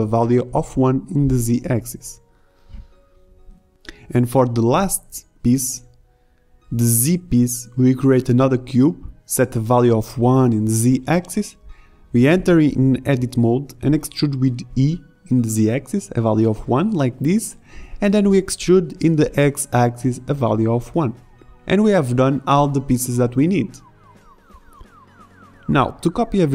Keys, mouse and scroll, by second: 2.1 e, 2.3 g, 6.0 a, 9.1-10.9 drag, 10.6 g, 12.5 Tab, 13.2 ctrl+r, 14.4 ctrl+Tab, 16.2 g, 16.2 e, 18.2 e, 19.5 Tab, 22.8 g.